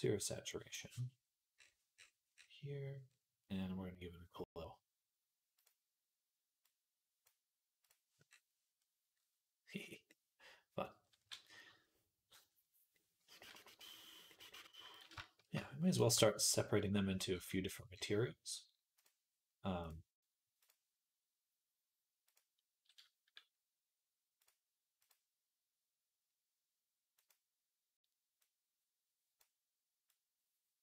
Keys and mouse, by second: 18.9 click, 19.7-24.2 middle drag, 24.2-27.1 drag, 27.1-30.8 middle drag.